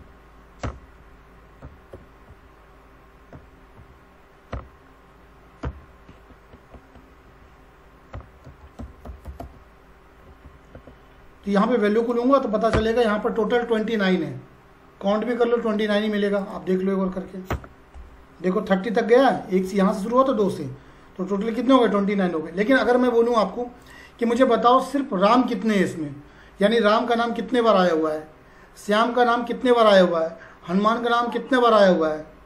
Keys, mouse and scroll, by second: 0.0-0.4 typing, 0.7 Return, 1.0 Up, 1.6 Left, 4.5 =, 5.6 c, 7.3 Right, 7.9-9.9 typing, 10.5 Down, 10.7 Tab, 12.0 click, 12.7 Return, 16.4 click, 17.5 ctrl+shift+Down, 19.4-19.9 scroll up 1, 23.2 click.